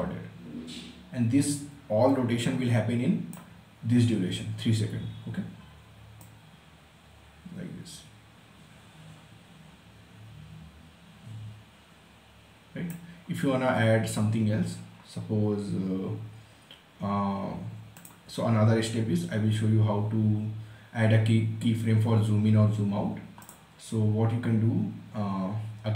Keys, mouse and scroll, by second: 5.7-15.9 drag, 17.5 click, 22.9 click.